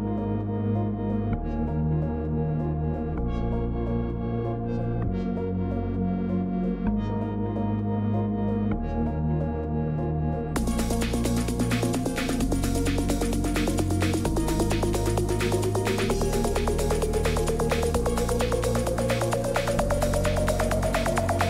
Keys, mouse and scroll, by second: 0.0-1.4 typing, 0.7 scroll, 1.1-1.7 click, 3.8-10.1 typing, 4.1 click, 5.2 click, 6.1 scroll, 7.8 right click, 9.4 click, 12.1 click, 14.0 click, 14.0-18.1 typing, 15.7 click, 16.8 click, 18.8 right click, 20.7 click, 21.0-21.4 Escape, 21.1-21.4 typing.